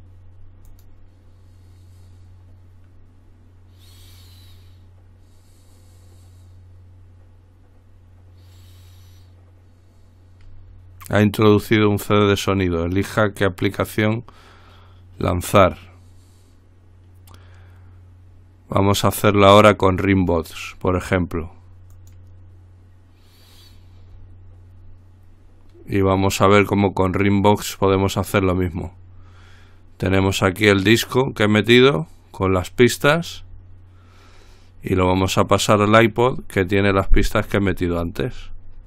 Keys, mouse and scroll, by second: 0.9 click, 14.0 click, 20.4 click, 22.1 click, 26.8 click, 31.0 click, 35.2 click, 37.1-38.5 scroll down 1, 38.5-38.8 scroll up 1.